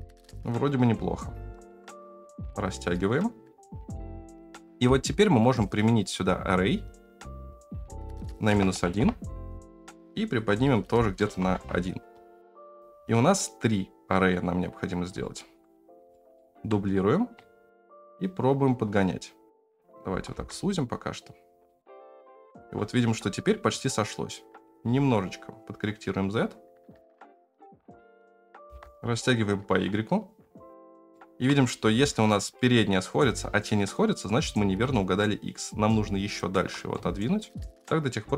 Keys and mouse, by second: 1.4 s, 5.5-6.9 drag, 7.9-9.6 drag, 9.6 middle click, 9.9-11.6 shift+drag, 12.5 shift+click, 12.7 KP_0, 15.1-15.5 shift+middle drag, 16.1 shift+middle drag, 17.3 shift+click, 17.9-19.7 shift+middle drag, 20.1 s, 21.9 shift+middle click, 24.9-27.1 shift+middle drag, 27.1 ctrl+z, 27.3 shift+middle click, 27.5 shift+middle click, 27.9 shift+middle click, 28.6 s, 31.1 shift+middle click, 31.7 g, 35.0-36.3 shift+drag, 36.9 shift+middle click.